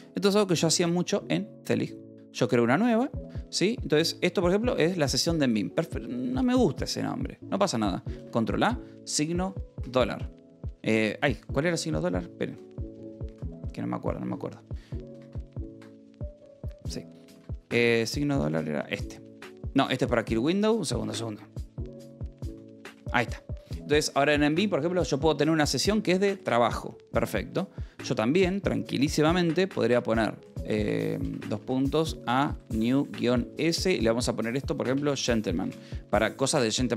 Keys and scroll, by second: 1.1 ctrl+a, 2.1 c, 4.1 ctrl+l, 8.7 ctrl+a, 10.3 shift+5, 11.1 space, 11.3 w, 11.8 BackSpace, 13.1 ctrl+a, 13.2 w, 14.2 Escape, 15.7 ctrl+a, 15.7 x, 16.6 y, 17.8 ctrl+a, 19.0 shift+7, 19.8 Escape, 20.8 ctrl+a, 24.2 BackSpace, 25.5-26.7 typing, 30.8-33.6 typing, 34.7-36.2 typing.